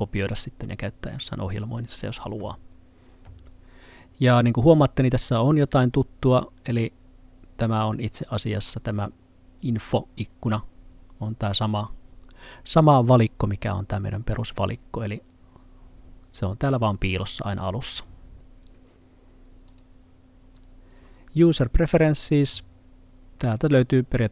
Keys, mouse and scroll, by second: 14.8 click.